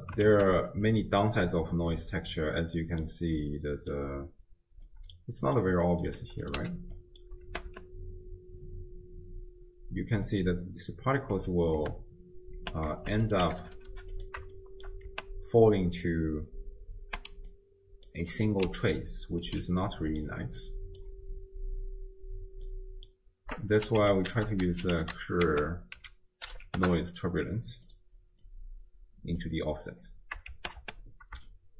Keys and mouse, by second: 0.3 shift+space, 2.7-3.2 middle drag, 3.5 middle click, 4.2 space, 4.9 click, 4.9 right click, 5.0 middle click, 5.1 click, 5.1 right click, 5.2 middle click, 5.4 click, 5.4 right click, 5.4 middle click, 5.9 middle click, 6.4 click, 6.6 m, 7.0 middle click, 7.5 shift+space, 11.4 space, 11.8 space, 12.6 space, 13.2 click, 13.6 5, 13.8 5, 14.7 shift+drag, 15.1 space, 17.1-19.8 typing, 17.5 click, 18.9 click, 19.8 middle click, 20.1 click, 20.1 right click, 20.6 click, 22.7 click, 22.7 right click, 23.9 x, 24.3 ctrl+a, 28.4-29.4 drag, 30.5 shift+space, 31.5 shift+click.